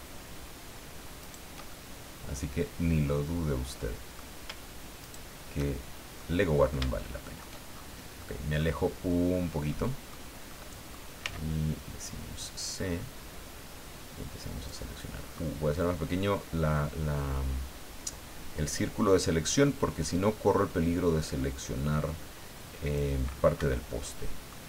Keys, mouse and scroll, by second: 1.2 shift+right click, 1.7-4.3 shift+middle drag, 5.0 shift+right click, 6.2 middle click, 7.0 shift+middle click, 7.7-8.0 shift+scroll down 2, 8.2 middle click, 9.3 scroll down 2, 9.7 middle click, 10.5 middle click, 11.2 c, 12.0-14.9 drag, 15.2-15.5 scroll up 2, 15.8-23.2 drag, 23.6 Escape, 24.0 scroll down 1, 24.5 middle click.